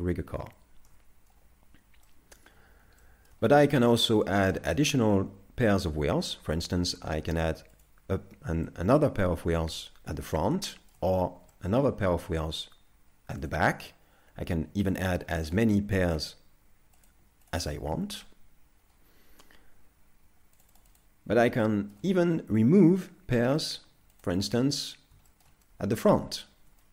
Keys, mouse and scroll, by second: 2.1 middle click, 2.8 scroll.